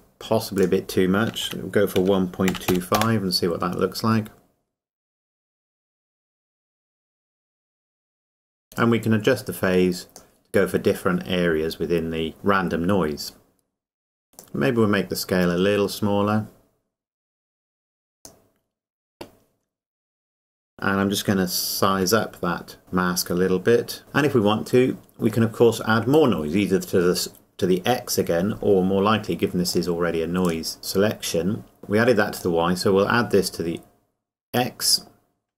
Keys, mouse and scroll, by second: 8.8 KP_Enter, 9.2 click, 14.4 click, 22.0 s, 22.8 click, 29.7 click, 31.8 click.